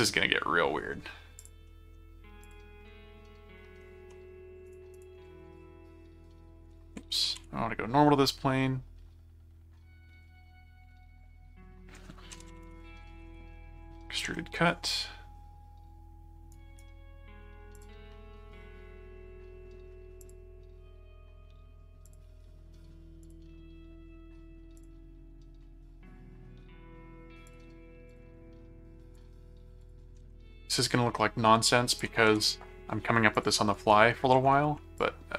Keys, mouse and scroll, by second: 1.4 click, 1.7 middle click, 2.4 click, 2.8 middle click, 4.7 click, 5.5 ctrl+1, 7.3 n, 12.1-13.7 typing, 14.2 Return, 16.5 right click, 17.7 click, 20.2 click, 22.1 click, 23.2 click, 24.8 click, 27.5 click, 28.2 click, 29.2 ctrl+click, 29.8 ctrl+click, 30.2 ctrl+alt+q, 30.8 ctrl+click, 31.9 ctrl+alt+click, 32.3 ctrl+alt+q, 33.3 click, 33.7 right click, 35.0 click.